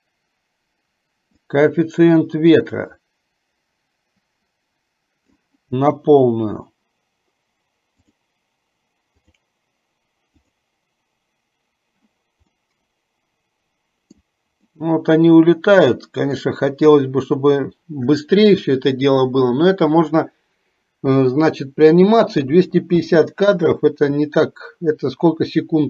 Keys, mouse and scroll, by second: 1.6-5.5 drag, 8.4 click, 9.5 click, 10.6 click, 12.8-14.4 middle drag, 14.9-16.5 middle drag, 23.1 space.